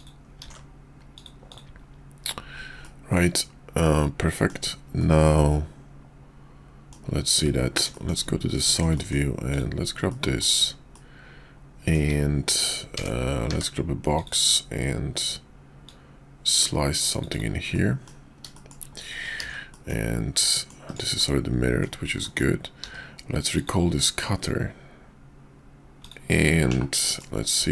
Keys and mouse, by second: 0.0 click, 1.2 click, 1.5 click, 2.8-4.5 middle drag, 5.0-6.9 middle drag, 8.7 shift+middle click, 10.1 middle click, 10.9-12.0 middle drag, 12.9 d, 13.4 d, 15.7-17.4 drag, 17.7-18.1 middle drag, 18.5 shift+middle drag, 19.4 alt+x, 21.2-21.8 middle drag, 22.2 middle click, 22.8 q, 27.0 middle drag.